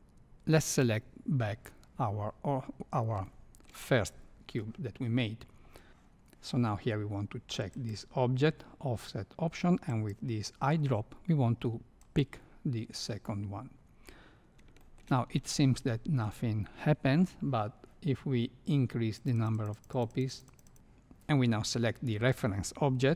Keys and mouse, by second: 0.6 click, 3.3 shift+middle click, 7.7 click, 10.0 click, 14.7 shift+middle click, 15.5 shift+middle click, 19.2 click, 19.5 click, 19.9 click, 20.2 click, 20.6 click.